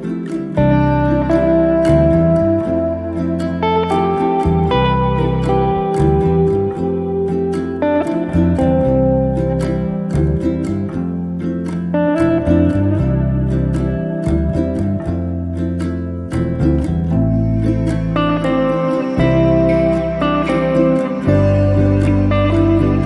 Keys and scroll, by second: 0.2 space, 9.9 m, 15.2 2, 15.9 8, 16.3 Return, 18.1 space.